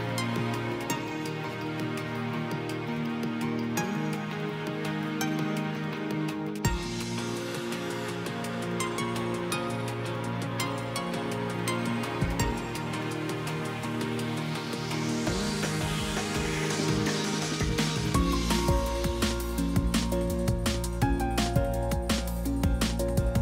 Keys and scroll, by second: 1.9 Return, 4.2 Return.